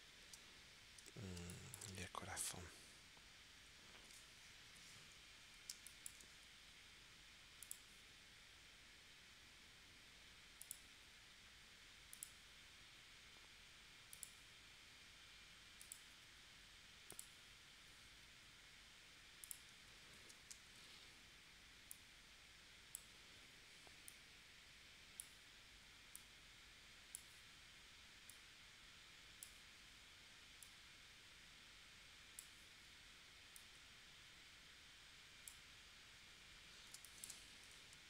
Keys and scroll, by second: 0.3 space, 1.5 space, 4.7 p, 5.7 space, 20.1 shift+c, 36.9 space, 37.7 a.